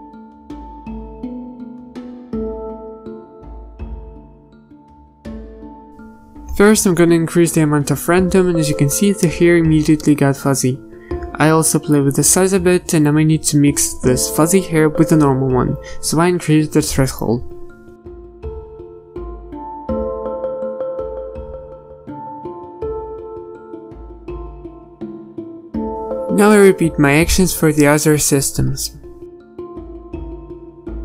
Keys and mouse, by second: 3.2 BackSpace, 12.1-31.0 drag.